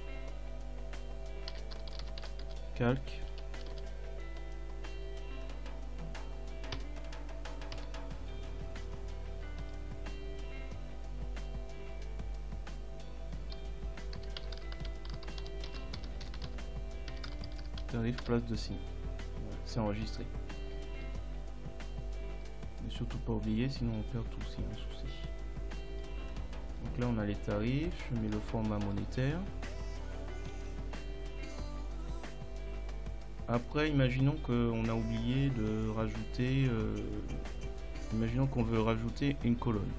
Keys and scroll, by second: 1.6-3.8 typing, 6.8 Return, 13.9-15.1 typing, 16.1-17.7 typing, 18.3 Return.